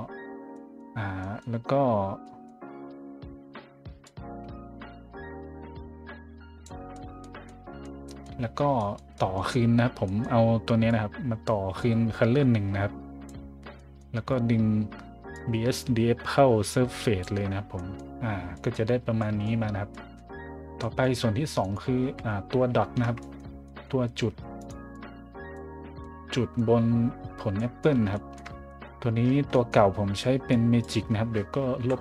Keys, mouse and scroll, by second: 0.5 middle click, 1.2 middle click, 2.2 middle click, 4.0-6.6 drag, 6.9 scroll up 1, 7.4-9.3 scroll up 5, 10.0 scroll up 1, 10.9-13.2 drag, 13.7 middle click, 15.3-17.2 drag, 17.6-18.0 scroll up 2, 18.3-19.4 scroll up 4, 19.4 middle click, 19.9 scroll up 1, 20.8 scroll up 1, 21.6 right click, 22.0 a, 23.2 middle click, 23.6 middle click, 24.6 right click, 24.9 click, 25.8 scroll down 1, 26.0 middle click, 27.5 middle drag, 28.1 shift+middle drag, 28.7 middle click, 29.5 middle click, 30.5 drag, 31.8 Delete.